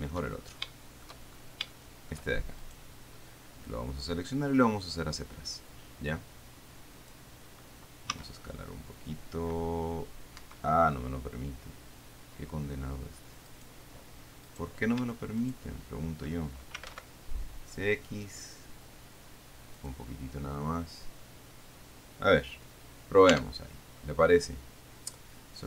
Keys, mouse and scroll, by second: 0.6-1.0 shift+scroll up 2, 1.0 shift+click, 2.0 shift+click, 2.9 shift+right click, 3.9-7.6 drag, 8.4 s, 10.6 Escape, 13.8 right click, 14.7 right click, 15.7 shift+click, 17.0 x, 20.0 click, 23.6 Tab, 24.3-24.8 scroll up 2, 24.8 scroll down 2.